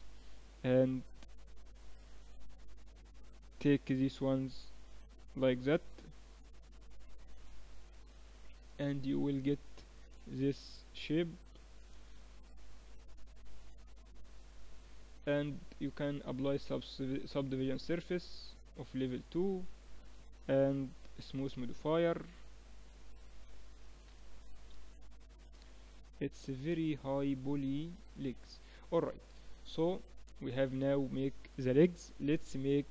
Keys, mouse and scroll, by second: 1.2-3.7 typing, 5.2-7.1 drag, 7.1 middle click, 7.6 Tab, 8.5-11.1 middle drag, 10.0 z, 15.2-17.0 drag, 18.6-23.5 drag, 22.7 t, 24.7-29.4 middle drag, 29.4 KP_1.